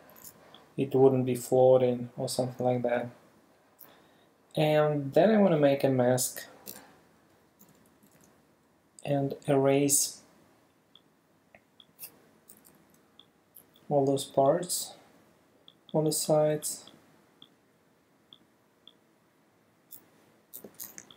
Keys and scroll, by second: 6.7 e, 7.6 [, 12.5 ], 20.6 v.